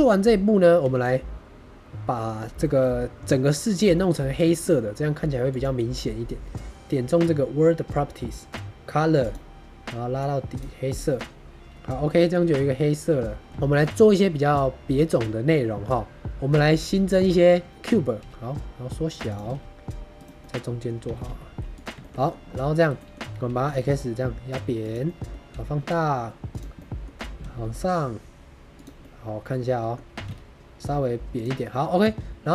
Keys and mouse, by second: 0.8 shift+a, 2.5 shift+middle click, 2.7 middle click, 3.8 shift+middle drag, 4.4 shift+middle drag, 11.0-12.0 middle drag, 12.5-13.4 middle drag, 13.6 shift+middle click, 13.8 middle drag, 15.0-15.8 middle drag, 18.1 s, 19.2 click, 19.3 g, 19.4 x, 20.1 click, 20.3-20.8 drag, 20.3-20.8 middle drag, 21.0 g, 21.1 y, 21.6 click, 21.9 shift+middle drag, 22.1 middle click, 22.9 middle drag, 23.4 s, 23.6 x, 24.7 click, 25.0 middle drag, 25.4 s, 26.4 click, 26.7-27.0 drag, 27.3 g, 28.7 click, 28.9-29.8 drag, 30.1 s, 30.1 z, 31.2 click, 31.5 middle drag, 32.1 Tab.